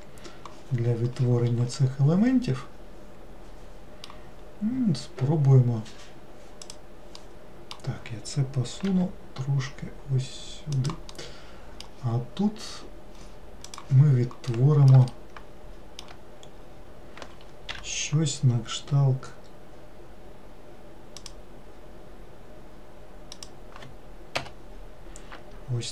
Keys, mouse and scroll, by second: 6.7 click, 7.3-9.0 middle drag, 9.0 g, 11.2-14.2 middle drag, 14.6-16.7 middle drag, 16.7-17.8 scroll up 2, 17.8 k.